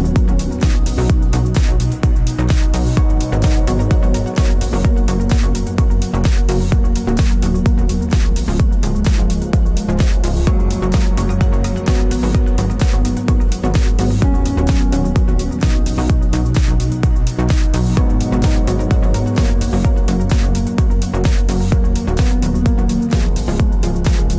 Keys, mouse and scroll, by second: 1.1 click, 2.0 Tab, 2.5 alt+click, 3.5 alt+shift+click, 3.9 g, 8.3 Tab, 8.5 middle click, 8.7 click, 9.0-15.6 middle drag, 11.8 scroll down 1, 15.6 click, 15.9 Tab, 16.3 click, 16.4-17.0 middle drag, 16.7 3, 17.0 click, 17.1-18.2 middle drag, 17.7 KP_Divide, 18.2 shift+click, 18.8 shift+click, 18.9 shift+click, 19.0-21.6 shift+middle drag, 19.6 KP_3, 20.2 z, 21.6 Tab, 22.4 KP_Divide, 22.9 KP_3, 23.3 scroll up 1, 23.4 Tab.